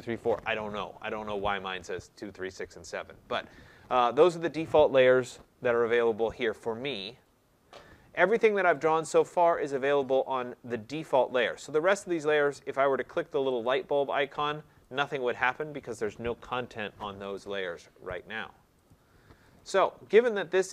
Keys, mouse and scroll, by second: 13.6 click, 14.2 click, 15.0 click, 15.6 click, 17.4 click, 18.2 click, 18.9 click, 19.5 click.